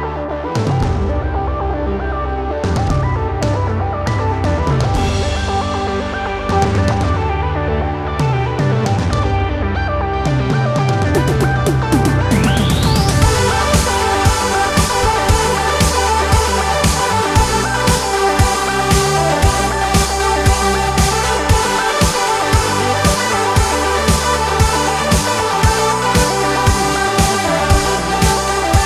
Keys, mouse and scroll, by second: 0.7 KP_7, 0.9 click, 2.2 shift+click, 2.5 shift+click, 2.8-3.4 shift+super+drag, 3.4 shift+click, 3.9 super+KP_3, 4.8 middle click, 5.0-5.6 super+drag, 6.9-8.0 shift+drag, 8.4 shift+super+click, 9.7 super+s, 10.1 click, 10.8 drag, 10.9 KP_3, 11.6 click, 12.0 space, 12.3 click, 12.3 super+z, 14.4 click, 15.2 click, 15.4 KP_3, 15.6 shift+drag, 16.4 ctrl+KP_1, 17.2 click, 17.4 super+click, 19.3 click, 19.4 super+s, 20.0 click, 20.3 n, 21.3 click, 22.2 click, 24.4 click, 24.4 KP_7, 25.1 click.